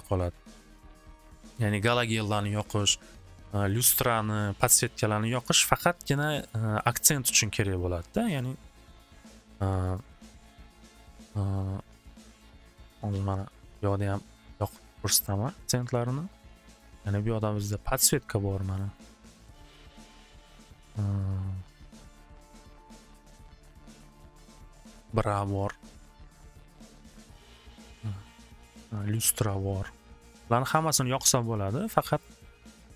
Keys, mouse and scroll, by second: 9.9 click, 10.7 click, 11.3 click, 11.5 click, 11.8 click, 12.4 click, 12.7 click, 13.0 click, 13.4 click, 14.2 click, 14.7 click, 15.2 alt+w, 15.4 alt+w, 16.0 middle click, 17.1 click, 18.3 click, 18.8 middle click, 19.0 middle click, 19.9 click, 21.2 click, 21.6 click, 22.5 click, 23.1 click, 24.5 click, 25.2 middle click, 26.6 click, 27.5 click, 27.8 click, 28.6 middle click, 29.3 click, 30.4 click, 30.9 click, 32.2 click.